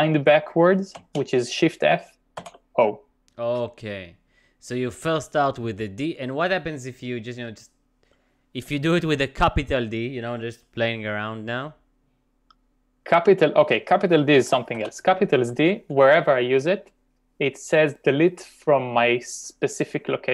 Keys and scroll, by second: 1.0 shift+f, 2.4 shift+o, 8.1 u, 14.3-15.3 typing.